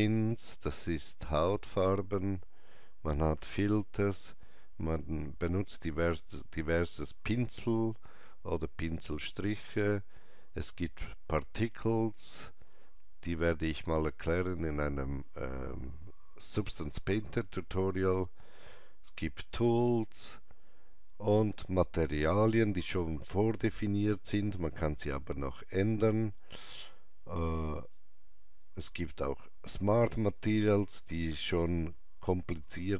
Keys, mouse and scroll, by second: 1.4 scroll down 1, 2.6 click, 4.4 click, 9.8 click, 12.7 click, 12.7 scroll down 1, 18.6 click, 18.6 scroll down 1, 21.4 click, 21.4 scroll down 1, 23.4 scroll down 1, 26.1-26.7 scroll down 1, 27.8 click, 28.0 click, 28.0 scroll down 1.